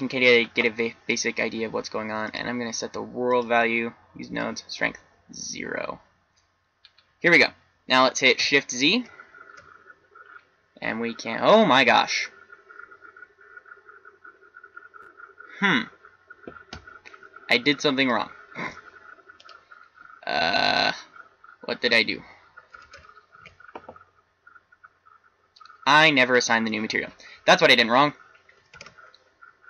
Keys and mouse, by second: 2.2 click, 7.0-8.9 middle drag, 8.9 shift+z, 17.9-22.6 middle drag, 23.0 shift+z, 24.3 Tab, 27.4 Tab, 28.8 shift+z.